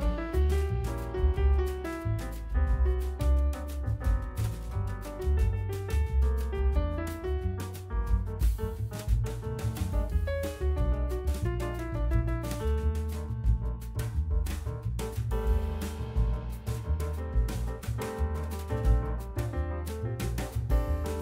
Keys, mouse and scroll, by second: 0.7-2.0 scroll down 2, 2.0-2.8 scroll down 10, 2.8-3.7 middle drag, 3.7 scroll down 1, 3.9 middle click, 4.2-4.8 scroll up 2, 4.8 ctrl+s, 5.2 click, 9.4 scroll up 1, 9.6 shift+middle click, 10.3 shift+s, 11.6 shift+s, 12.4-12.7 scroll down 1, 12.7-14.3 shift+middle drag, 14.6-15.1 scroll up 2, 15.1-15.5 scroll down 1, 15.5-16.1 middle drag, 16.1-16.5 scroll down 1, 16.5 middle click, 17.3-17.7 scroll up 2, 17.7-21.2 shift+middle drag.